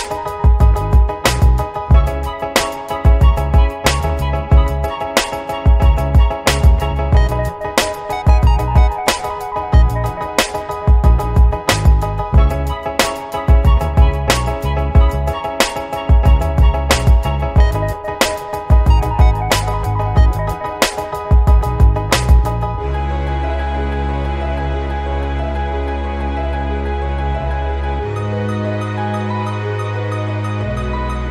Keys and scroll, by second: 18.8 b, 19.6 b, 20.2 [, 26.1 ctrl+z, 29.3 |.